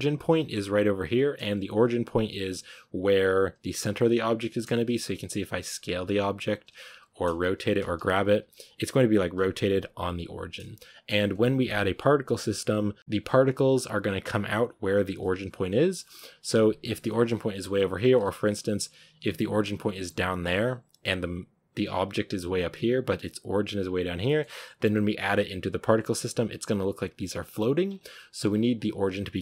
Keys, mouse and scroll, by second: 1.1-1.5 scroll down 1, 1.5 g, 3.5 r, 4.8-5.3 scroll up 4, 5.3 scroll down 3, 5.6 r, 6.8 s, 7.8 g, 8.3 r, 16.7-17.6 scroll up 1, 17.6 Tab, 17.8 scroll down 3, 18.1 a, 18.7 g, 19.4 Tab, 20.1 g, 24.1 shift+middle click, 24.5 g, 27.7 scroll up 3, 28.0-28.4 shift+middle drag, 28.4 scroll up 3, 29.2 scroll up 1.